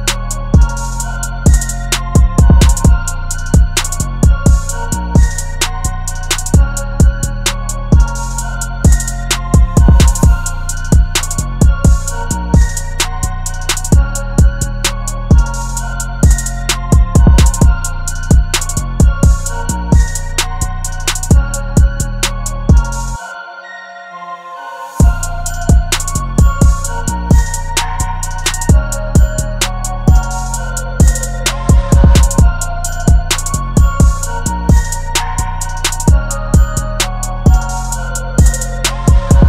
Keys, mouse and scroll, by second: 13.0 alt+click, 19.9 right click, 21.8 double click.